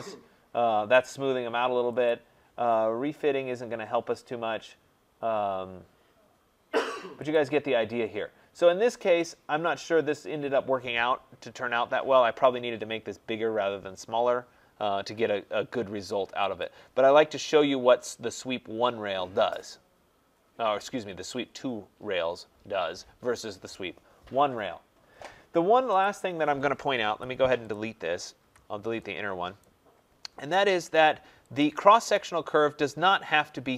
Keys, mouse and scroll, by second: 2.0 click, 7.3 click, 9.1 middle click, 9.1 middle click, 16.6 click, 17.7 middle click, 17.7 scroll, 21.4 scroll, 24.1-24.5 scroll, 24.5 middle click, 24.6 middle click, 25.1 middle click, 25.2 middle click, 26.0 click, 27.0 Delete, 27.7 click, 28.4 Delete, 29.6 right click, 30.0 middle click, 30.0 middle click, 30.1 middle click, 31.6 click.